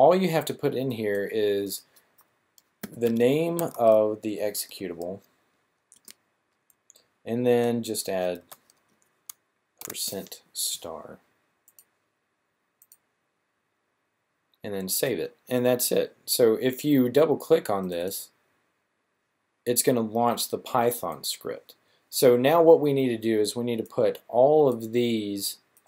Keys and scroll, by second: 2.5-4.6 typing, 8.2 typing, 9.6 typing.